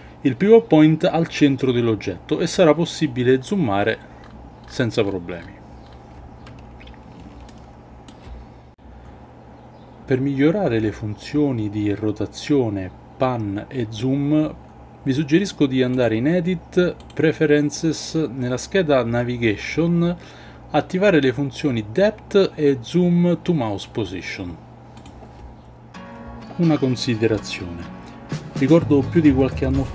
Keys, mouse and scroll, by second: 7.5-8.1 shift+middle drag, 15.9-17.2 drag.